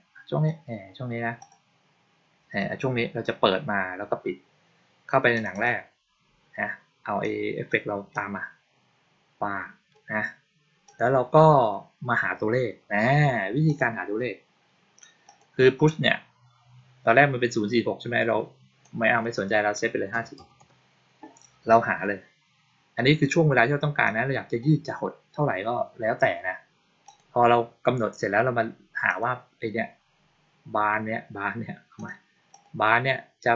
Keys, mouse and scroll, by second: 1.2 click, 5.2 click, 5.4 click, 7.1-7.5 drag, 8.0-9.8 drag, 10.7 click, 13.5 click, 15.1 click, 18.7-19.1 drag, 23.9-24.5 drag, 26.9 click, 28.9 click, 31.8 click, 32.4 click.